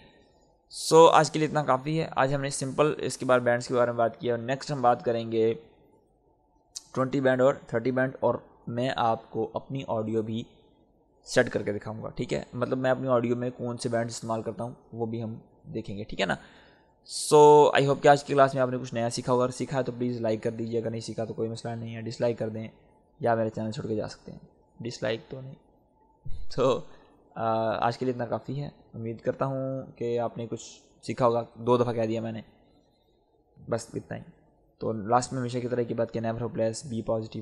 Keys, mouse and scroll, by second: 0.9-3.4 drag.